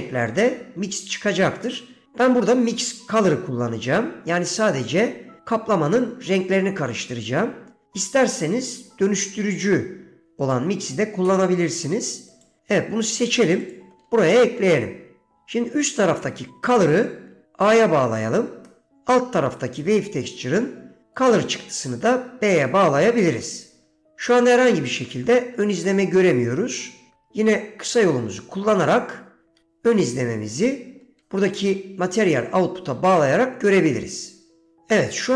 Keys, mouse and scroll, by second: 14.6 middle click, 17.2-18.4 drag, 18.8 middle click, 21.7-23.6 drag, 24.4-25.5 middle drag, 29.1 ctrl+shift+click, 31.3 middle click.